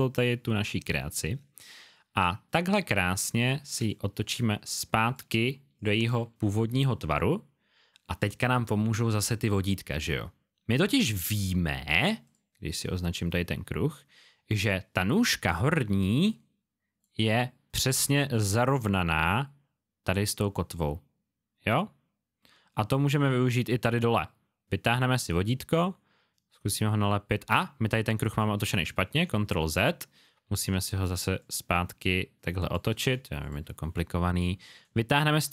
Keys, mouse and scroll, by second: 3.8 shift+click, 5.7 click, 11.3-11.7 alt+scroll up 1, 12.2-14.9 scroll up 1, 22.4 space, 22.7 click, 24.9 click, 29.6 z, 31.3 shift+click, 33.4 click.